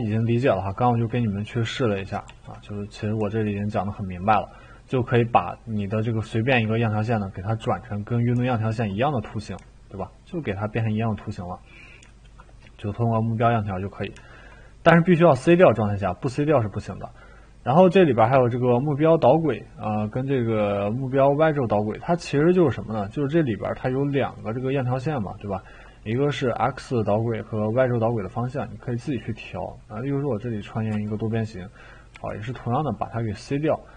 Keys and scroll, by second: 1.6 ctrl+z, 2.3 ctrl+z, 30.9 t.